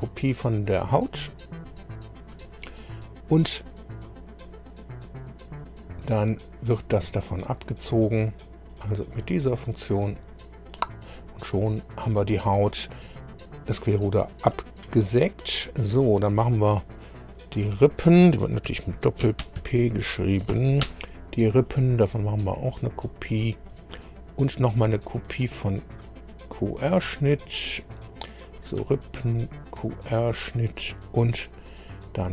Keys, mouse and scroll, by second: 0.8 click, 1.7 scroll down 2, 2.3 click, 5.6 ctrl+click, 9.1 click, 11.2-12.9 middle drag, 15.9 click, 17.7 F2, 18.4-20.5 typing, 20.8 Return, 22.5 click, 23.3-23.6 scroll down 2, 25.1 click, 27.2 click, 27.8-28.1 scroll down 2, 28.4 click, 29.1 ctrl+click.